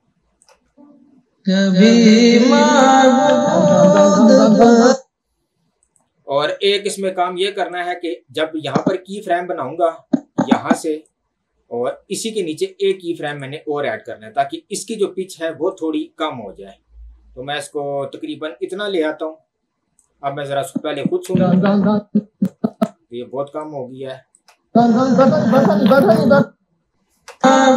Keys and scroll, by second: 0.8 space, 4.9 space, 21.2 space, 22.6 space, 24.7 space, 26.2 space, 27.2 space.